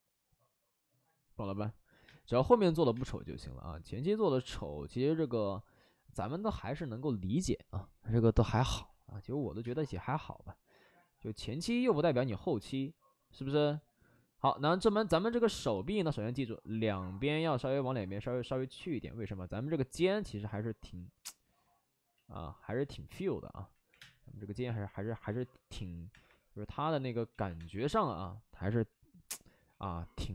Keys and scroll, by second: 2.0 space, 2.8 space, 9.5 space, 11.9 w, 15.5 w, 22.1 ctrl+z, 22.7 ctrl+z, 23.5 3, 23.5 4, 23.8 3, 23.9 space, 25.2 ctrl+z, 26.0 3, 26.2 3, 27.2 ctrl+z, 27.5 3, 29.6 w.